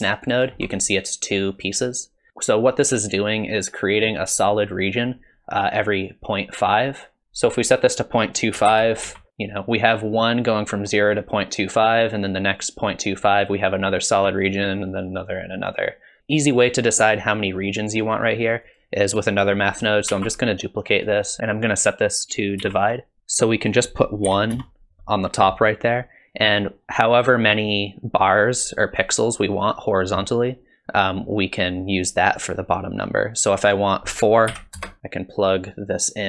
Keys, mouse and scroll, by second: 0.3 ctrl+shift+click, 7.2 click, 18.6 click, 20.1 shift+d, 22.2 click, 23.2 ctrl+z, 23.7 click, 33.6 click, 35.7 click.